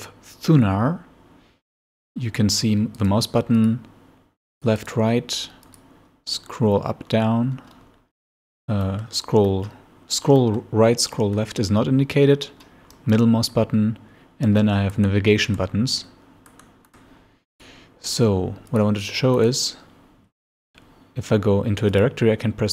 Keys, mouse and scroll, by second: 2.6 click, 3.0 middle click, 3.1 right click, 3.6 click, 4.6 click, 4.8 right click, 5.7 click, 6.3 scroll down 2, 6.7 scroll up 2, 7.2 scroll down 2, 7.3 scroll up 2, 7.5 scroll down 2, 7.7 scroll up 2, 7.9 scroll down 2, 8.0 scroll up 2, 10.3 scroll up 2, 13.0 click, 15.0 9, 15.5 8, 16.5 9, 17.2 scroll down 2, 17.6 click, 18.7 click, 19.4-19.7 scroll down 2, 20.4 click, 21.9 click.